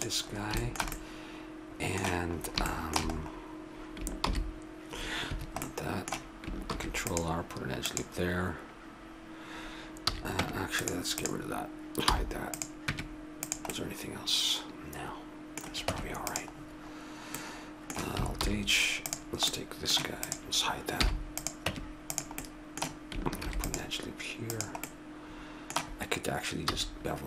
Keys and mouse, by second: 3.3 click, 4.2 ctrl+e, 6.7 ctrl+r, 10.1 a, 10.4 Tab, 11.1-13.7 right drag, 12.0 h, 12.9 Tab, 15.9 Tab, 18.4 alt+h, 19.0-22.0 drag, 21.0 h, 21.6 Tab, 22.4 middle click, 23.4 ctrl+r, 26.6 a.